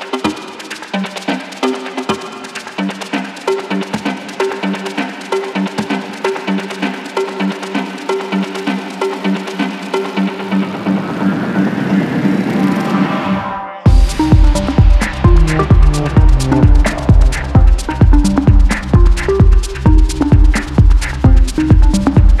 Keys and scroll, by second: 13.5-15.2 typing, 17.5-21.1 typing.